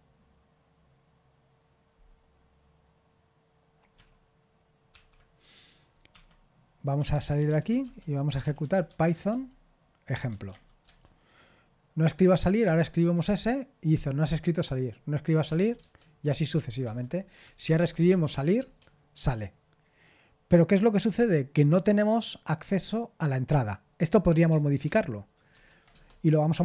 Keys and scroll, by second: 7.1-11.0 typing, 17.1-18.5 typing, 18.6 Return, 24.8 ctrl+p, 25.5 ctrl+p, 25.9 Return.